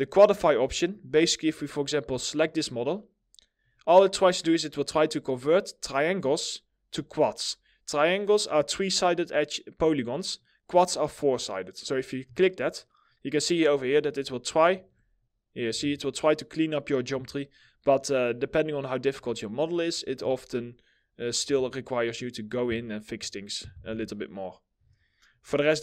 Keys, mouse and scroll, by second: 1.1 middle click, 2.7 scroll up 1, 12.7 middle click, 13.1-14.0 scroll up 1, 14.0 middle click, 14.3 ctrl+z, 18.0 scroll down 1, 19.3 middle click, 19.8 ctrl+z, 20.6-21.3 scroll up 1, 21.3 middle click, 23.4 2.